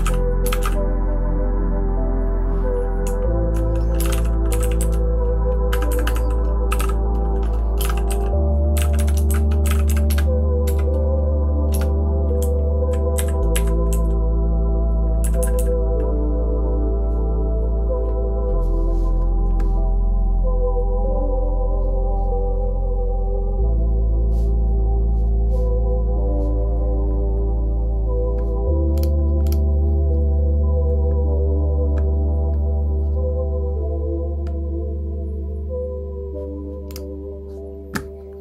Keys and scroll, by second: 0.0-0.5 typing, 3.7-5.3 typing, 5.7 Escape, 5.9 Escape, 6.1 Escape, 6.4-10.1 typing, 10.6 shift+Tab, 11.8 Return, 11.8 typing, 12.4 Down, 13.1 Up, 13.5 Up, 13.9 Down, 15.2 Left, 15.4 Left, 15.5 Left.